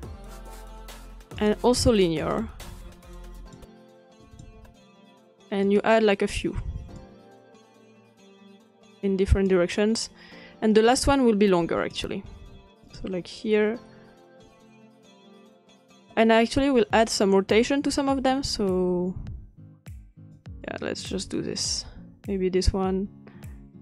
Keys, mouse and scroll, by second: 1.4-6.4 drag, 7.0-17.1 drag, 17.8-19.8 scroll down 2, 20.3-22.4 drag.